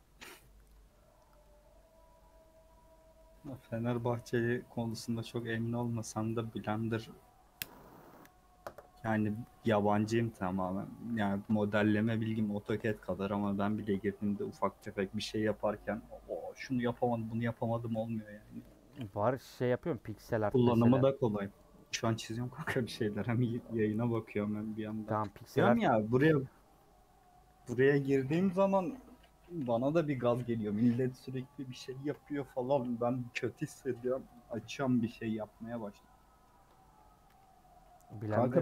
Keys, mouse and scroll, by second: 0.2 middle click, 0.4 Tab, 0.6 middle click, 1.1 scroll up 1, 1.4 scroll down 1, 1.4-3.1 middle drag, 3.1 scroll down 1, 3.8 scroll up 1, 4.1-11.7 middle drag, 11.7-12.3 scroll up 1, 12.3 3, 12.5 click, 12.8-14.8 middle drag, 14.8 shift+click, 15.4 shift+click, 15.8 shift+click, 16.9 shift+click, 17.4 shift+click, 18.1 shift+click, 18.6 shift+click, 19.1 shift+click, 19.3 shift+middle click, 19.9 shift+click, 20.3 shift+click, 20.8 shift+click, 21.3 shift+click, 21.8 shift+click, 22.3 shift+click, 23.2 shift+click, 23.8 shift+click, 24.6 KP_Add, 24.8 KP_Add, 25.5 KP_Subtract, 27.2 KP_Add, 30.3-30.8 scroll down 2, 30.8 a, 32.8 u, 34.3 click, 36.1 middle click, 36.6 Tab, 37.2 /, 37.8 scroll down 1, 38.2 h, 38.5 middle click.